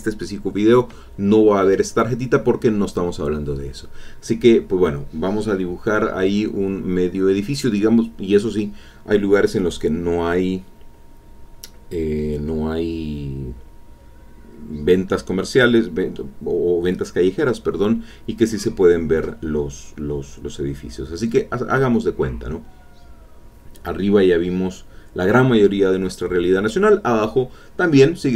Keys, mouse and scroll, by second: 0.5 click, 1.0 click, 2.3 click, 3.0-4.4 drag, 5.0-7.4 drag, 9.6-15.4 drag, 16.6-21.4 drag, 21.6 click, 23.1-24.4 drag, 24.5 ctrl+middle click, 24.5-25.5 ctrl+scroll up 3, 25.0 ctrl+middle click, 25.5 middle click, 25.5 click, 27.0 click, 27.6 ctrl+click, 28.2 ctrl+click.